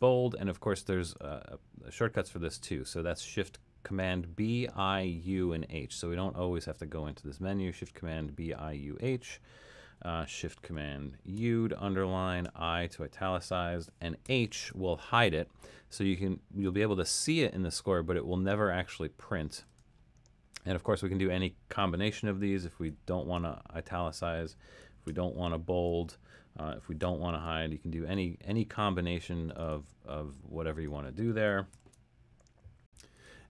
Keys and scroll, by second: 11.4 shift+super+u, 12.4 shift+super+i, 14.4 shift+super+h, 22.9 shift+super+i, 25.1 shift+super+b, 27.0 shift+super+h, 31.3 shift+super+u.